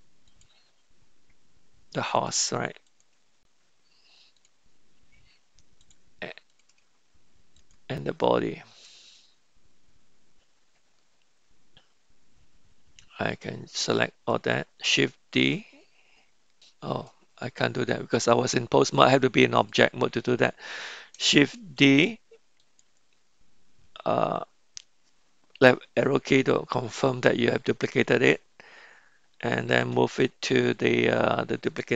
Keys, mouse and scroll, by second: 0.2 click, 2.9 click, 5.8 click, 6.5 click, 7.5 shift+click, 15.3 shift+d, 16.6 m, 17.8-19.9 drag, 21.9 shift+d, 29.8 m.